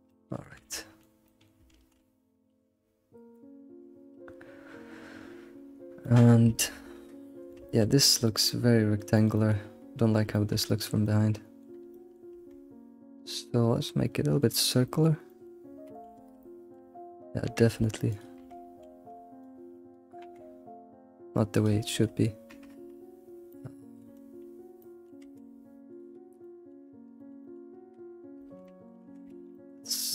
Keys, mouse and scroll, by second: 0.2 middle click, 0.6 ctrl+s, 0.7 middle click, 1.4-7.6 drag, 1.4 middle click, 1.7 ctrl+s, 5.8 scroll down 2, 6.0-7.8 middle drag, 8.0 scroll up 2, 8.3 middle click, 8.5 middle click, 8.9 middle click, 10.0-10.3 scroll up 2, 10.3-12.3 shift+middle drag, 12.3 Tab, 13.4 middle click, 14.1 middle click, 15.4 alt+middle click, 16.4 shift+middle click, 17.4 Tab, 17.6 Tab, 18.1 shift+click, 18.4 Tab, 19.1 alt+x, 19.4 click, 20.2 g, 21.8-23.5 shift+middle drag, 23.9-25.2 middle drag, 25.2 Tab, 25.4 Tab, 25.9 alt+click, 26.4 middle click, 28.4 middle click, 29.2 Tab, 29.5 middle click.